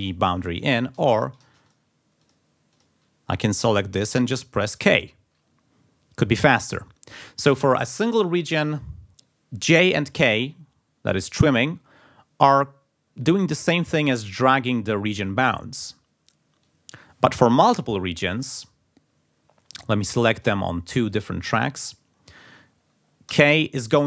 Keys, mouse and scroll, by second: 1.0 ctrl+z, 1.7 ctrl+click, 2.7 click, 4.6 k, 14.2 click, 15.5 click, 16.6 click, 17.6 ctrl+z, 18.0 ctrl+click, 19.8 click, 21.1-22.1 drag, 23.3 k.